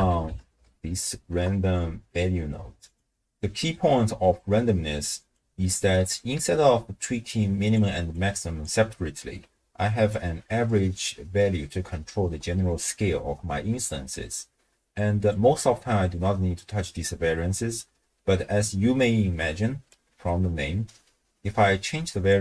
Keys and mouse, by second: 3.3 middle click, 4.4-5.4 drag, 5.6 middle click, 6.4-9.2 d, 7.3 click, 8.1 click, 9.4 d, 10.1-15.3 drag, 19.9-22.3 drag.